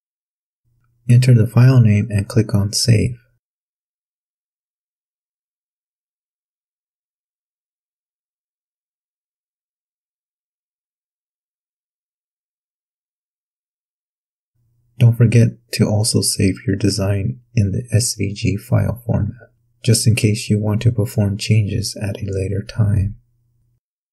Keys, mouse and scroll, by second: 0.4 click, 0.8 click, 2.1-4.0 typing, 4.8 click, 7.0 click, 7.5 click, 7.9 click, 8.4 click, 10.0 click, 15.3 click, 17.0 click, 19.8 click, 21.1 click, 23.6 click.